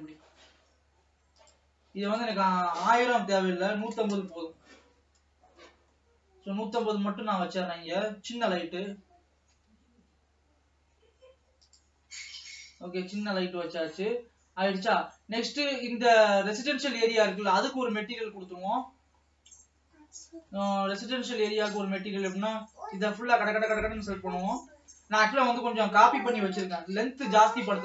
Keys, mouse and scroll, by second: 2.4-5.6 drag, 5.6-6.2 scroll up 2, 6.2-7.4 shift+middle drag, 7.4-8.5 scroll up 4, 8.5 g, 12.2 scroll down 3, 13.2 alt+a, 13.8 ctrl+s, 15.9 click, 16.4 Tab, 17.1 alt+a, 17.5 middle click, 18.5-20.2 scroll down 3, 20.2 click, 20.6-21.9 middle drag, 21.9-23.0 drag, 23.0 l, 23.3 l, 23.6-24.4 scroll down 3, 24.4 l, 24.9 scroll down 1, 26.6 KP_0.